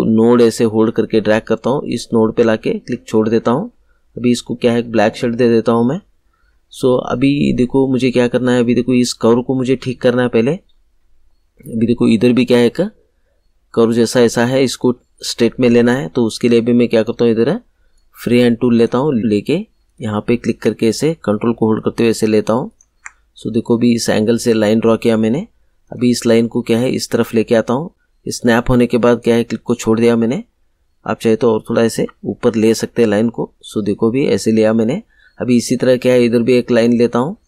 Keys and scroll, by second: 31.9 Up.